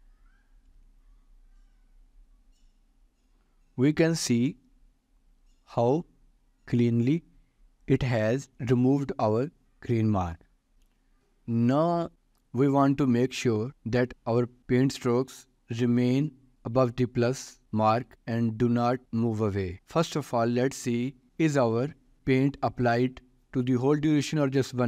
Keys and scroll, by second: 14.1 ctrl+s.